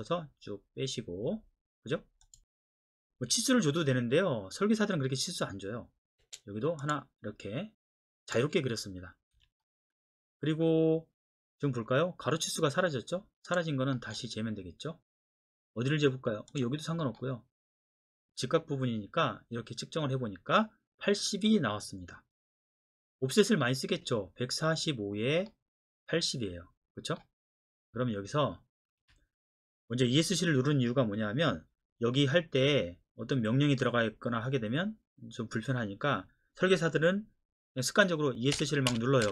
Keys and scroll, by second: 3.2 Escape, 6.2 space, 9.3 Escape, 29.0 Escape, 38.5 Escape, 38.9 Escape, 39.2 Escape.